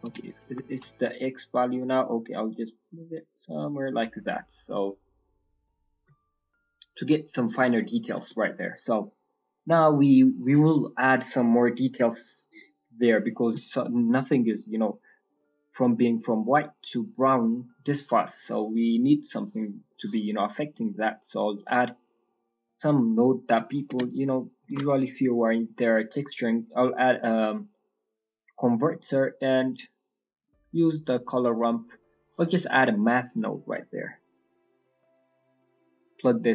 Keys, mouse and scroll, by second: 1.9 shift+click, 6.3-8.8 scroll down 16, 7.4 middle click, 8.4 middle click, 8.8 middle click, 9.3 scroll down 2, 9.5 middle click, 10.4-11.3 scroll up 5, 18.1-19.2 scroll up 3, 19.8 middle click, 20.1-20.9 scroll up 3, 20.5 middle click, 20.9 middle click, 21.2 scroll down 5, 21.5 middle click, 22.1 scroll down 2, 22.4 click, 23.8 g, 24.4 click, 24.6 shift+a, 33.8-34.4 scroll up 12, 34.4 middle click, 35.4 click.